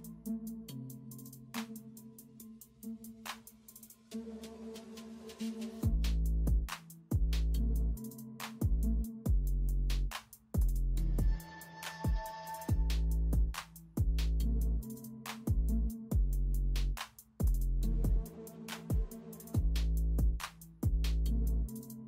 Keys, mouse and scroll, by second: 0.0-0.8 typing, 2.3 ], 4.1 ], 5.6 [, 6.6-8.5 typing, 10.9-13.2 typing, 18.6 space, 19.1 space, 20.0 space, 20.8 ].